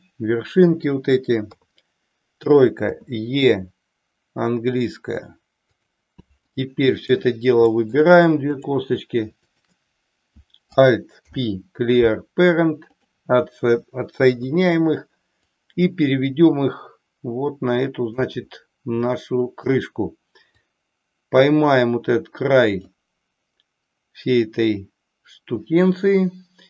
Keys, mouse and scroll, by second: 1.6 KP_3, 2.9 e, 6.4 click, 7.7 middle click, 8.5 click, 9.5 shift+click, 11.1 alt+p, 14.3 KP_3, 15.4-18.2 drag, 19.2 shift+middle click, 20.5-22.8 drag.